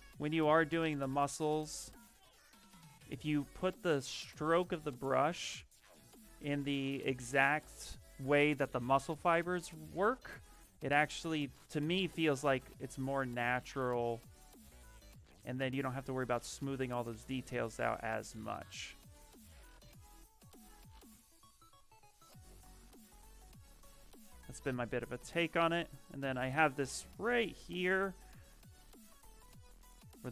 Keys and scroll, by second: 23.7 s.